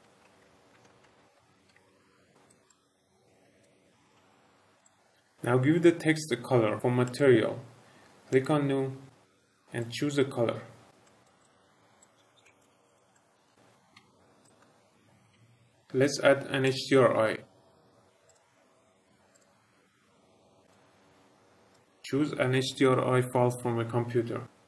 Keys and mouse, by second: 0.0-4.1 typing, 2.1 Tab, 2.7 middle click, 3.1 click, 3.2 click, 3.3 click, 4.0 Tab, 4.1 Tab, 4.3 middle click, 4.8 click, 7.0 click, 8.2 click, 9.7 click, 11.3 click, 11.9 click, 12.4 click, 12.5 click, 13.9 r, 14.4 click, 15.4 r, 16.6 click, 18.2 click, 19.3-20.8 drag, 21.7 click.